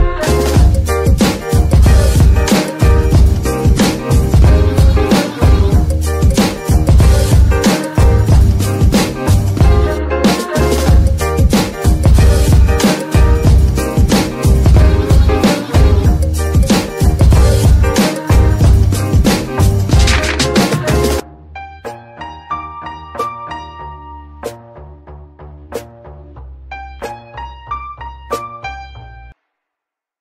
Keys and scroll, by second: 3.7 shift+d, 6.2 F2, 7.2 BackSpace, 7.4 BackSpace, 7.5 BackSpace, 7.6 BackSpace, 8.4 Left, 8.6 Left, 9.7 BackSpace, 11.0-16.4 typing, 17.8 Return, 22.3 alt+shift+s, 23.6 Tab, 24.0 Tab, 28.8 Tab, 29.8 s.